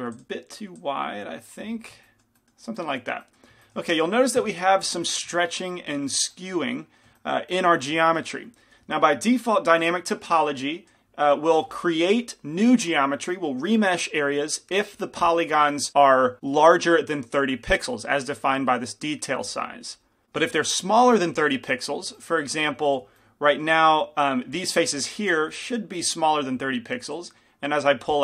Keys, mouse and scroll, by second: 0.1 f, 3.0-4.5 middle drag, 4.5 KP_5, 5.8-6.9 middle drag, 7.1 middle click, 20.1-25.7 middle drag, 22.8 f, 23.3-25.7 drag, 24.0 f, 25.7 f.